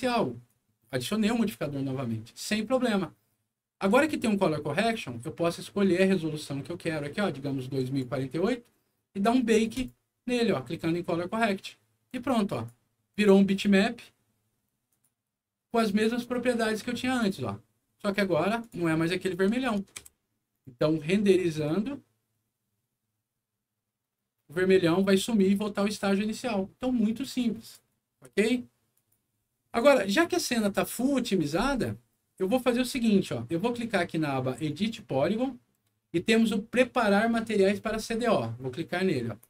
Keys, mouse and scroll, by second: 0.4 click, 5.8 click, 7.7 click, 9.7 click, 12.0 click, 13.1 click, 14.8 click, 16.4 click, 18.6 click, 19.3 click, 19.9 Delete, 20.5 click, 21.5 click, 27.6 click, 28.2 Escape, 28.9 click, 30.4 click, 33.6 click, 34.6 click, 39.3 click.